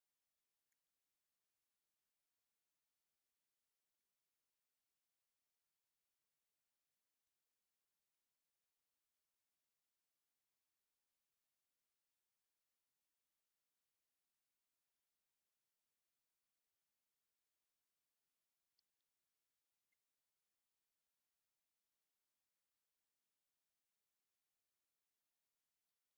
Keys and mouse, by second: 0.3 click, 0.7-1.0 middle drag, 3.1-4.1 drag, 7.3 ctrl+shift+click, 9.5-11.6 shift+drag, 12.1-13.4 shift+drag, 14.9-17.7 shift+drag, 18.7 middle click, 20.0 ctrl+shift+click, 21.4 middle click, 24.8 z, 25.7 middle click.